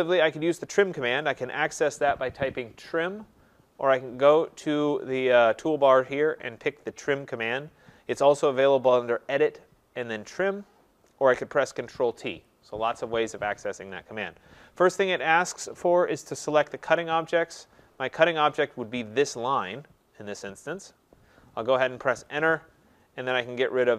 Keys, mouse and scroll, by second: 0.0 middle click, 9.3 click, 12.5 click, 18.6 click, 22.1 Return.